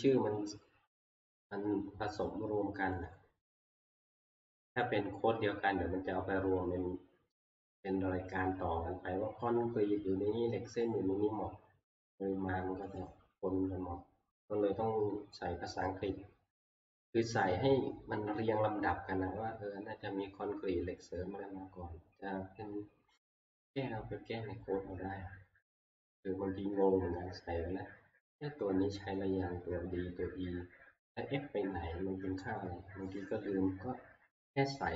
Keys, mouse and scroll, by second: 3.1 click, 4.2 click, 4.3 click, 4.5 click, 13.1-18.1 drag.